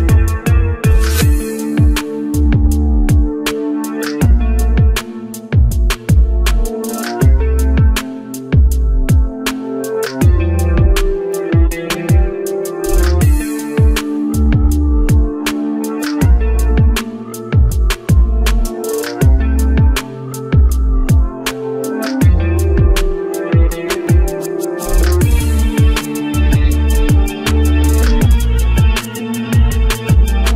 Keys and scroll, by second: 0.4 ctrl+alt+z.